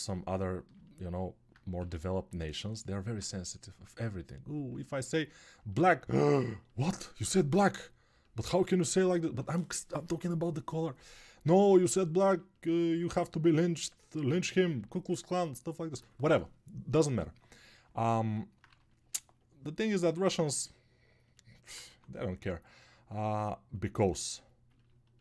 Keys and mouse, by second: 2.8-5.4 alt+drag, 2.8-5.4 alt+middle drag, 2.8-5.4 alt+right drag.